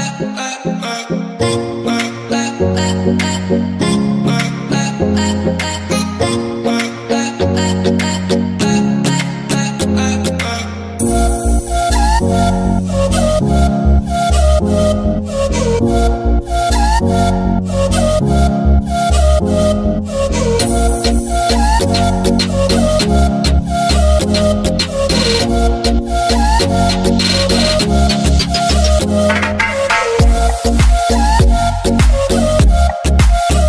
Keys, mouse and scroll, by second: 0.2 click, 1.2 scroll up 1, 1.6-5.3 middle drag, 5.1 KP_1, 6.5-7.2 shift+middle drag, 7.2-7.5 scroll up 1, 7.5 ctrl+s, 9.3 z, 10.1 ctrl+s, 10.3 click, 13.0-16.0 drag, 16.1 alt+a, 17.3 click, 19.7 click, 20.8 click, 21.2 click, 23.7 click, 24.3 alt+x, 25.6 click, 26.5 click, 27.5 a, 28.4-30.2 shift+middle drag, 30.2 click, 30.8 shift+middle drag, 31.0 scroll up 1, 31.5 g, 32.2 click, 32.7 g, 33.4 click, 33.6 scroll down 1.